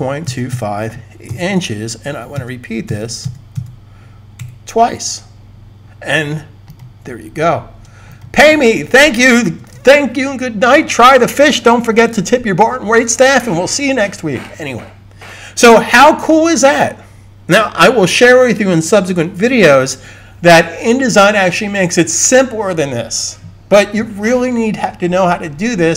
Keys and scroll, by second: 0.0-1.1 typing, 3.8-4.6 typing, 9.5 super+s.